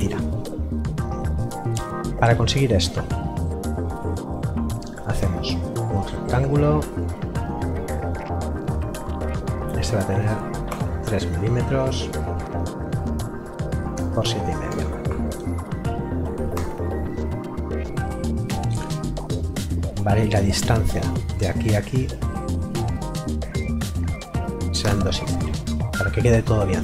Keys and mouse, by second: 3.6 click, 6.9 click, 10.7 KP_3, 14.0 Tab, 15.1 KP_3, 16.5 Return, 20.3 d, 21.3 click, 24.2 KP_2, 24.4 KP_Decimal, 24.6 KP_5, 24.8 KP_Enter.